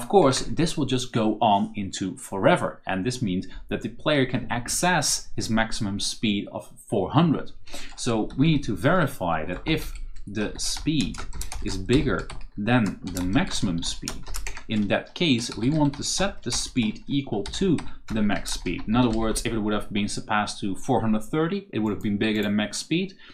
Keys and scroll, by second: 0.2 Return, 5.0 Return, 8.0-19.5 typing, 14.4 shift+Return.